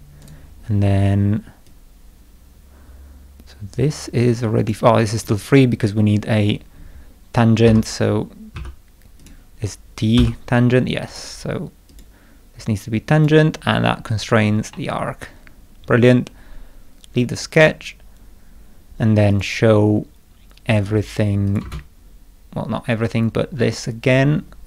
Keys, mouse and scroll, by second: 0.2 right click, 0.8 middle click, 1.6-4.7 drag, 5.1 click, 7.6 k, 8.5 t, 9.2 click, 10.2 t, 11.1 click, 11.9 click, 13.1 click, 13.9-14.4 scroll down 1, 14.7 middle click, 17.4 click, 19.3 click, 21.5 click, 21.6 space.